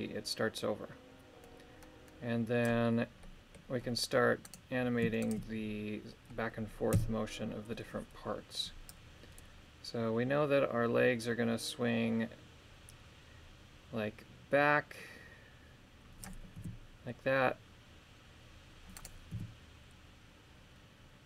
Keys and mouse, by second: 3.2 middle click, 4.4 right click, 5.2 shift+right click, 6.9 KP_3, 8.9-16.3 drag, 16.6 r, 19.3 r.